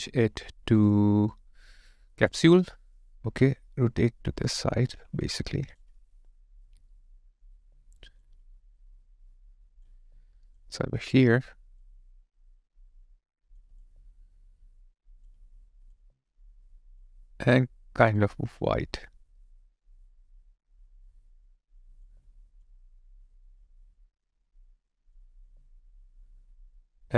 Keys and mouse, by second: 4.5 ctrl+click, 5.4 alt+click, 10.8 alt+right click, 13.7 alt+right click, 13.8 alt+click, 15.9 alt+click, 22.1 alt+click, 25.3 alt+click.